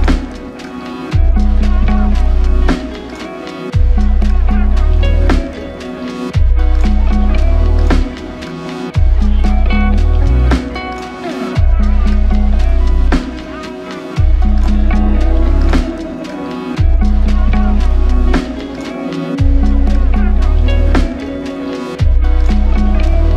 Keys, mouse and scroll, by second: 1.2 alt+shift+click, 2.7 f, 7.1-8.0 typing, 13.7 double click, 15.9 f, 17.0 alt+click, 19.1 double click, 22.3 alt+shift+click.